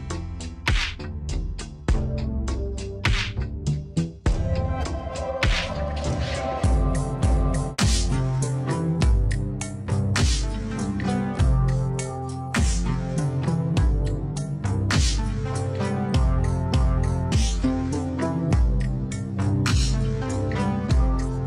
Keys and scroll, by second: 4.2 ctrl+-, 5.8 ctrl+=, 6.1 space, 6.7 Page_Down, 7.1 Up, 7.4 space, 8.0 Down, 8.4 Right, 10.5 space, 11.3 space, 12.6 space, 17.1 space, 18.1 Right.